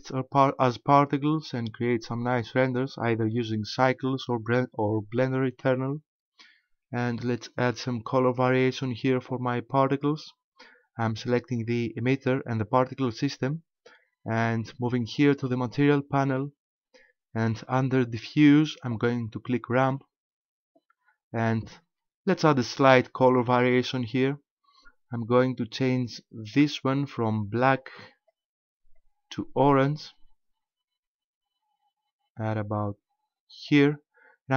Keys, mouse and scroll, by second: 9.9 right click, 16.3 click, 19.8 click, 26.5 click.